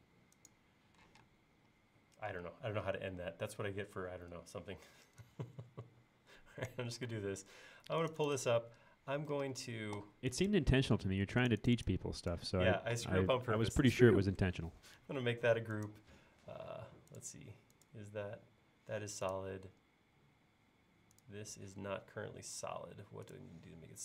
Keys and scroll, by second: 1.1 p, 7.1 space, 9.4 e, 11.0 space.